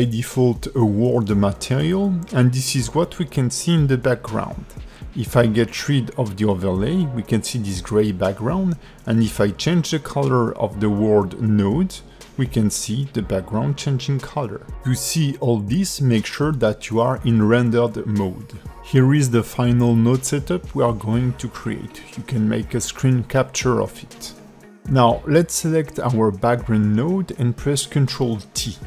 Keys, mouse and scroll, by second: 0.0 shift+middle click, 1.6 click, 2.9 click, 3.3 click, 6.3 click, 6.8-7.1 scroll down 2, 7.2 middle click, 9.1 click, 25.0 click, 28.4 ctrl+t.